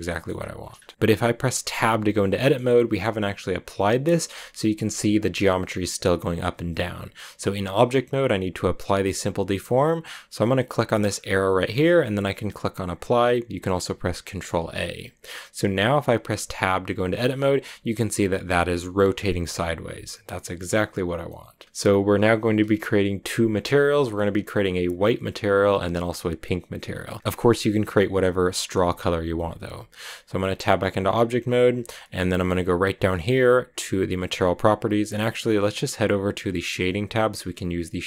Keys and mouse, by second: 0.7 shift+middle drag, 1.7 Tab, 2.0 middle click, 6.4 Tab, 11.7-14.4 drag, 17.0 Tab, 17.8 a, 19.2 a, 30.4 Tab.